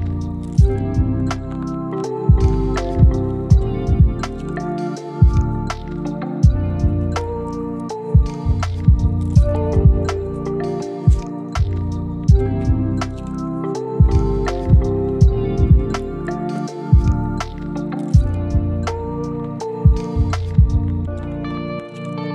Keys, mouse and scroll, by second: 1.1 right click, 2.9 click, 3.6 scroll down 1, 3.8 scroll up 1, 3.9 right click, 4.2-4.5 scroll down 1, 4.5 scroll up 1, 4.6 right click, 4.8 scroll down 1, 4.9-5.5 scroll up 1, 5.5 click, 5.8 right click, 6.0 scroll down 1, 6.1-6.6 scroll up 2, 6.2 right click, 6.6 right click, 6.8 click, 7.0 scroll down 1, 7.1 scroll up 1, 7.3 click, 7.9 middle click, 8.4 click, 10.9 click, 11.5 click, 13.0 click, 16.0 click, 16.7 middle click, 17.0 click, 17.4 middle click, 17.8 click, 18.9 right click, 19.4 click.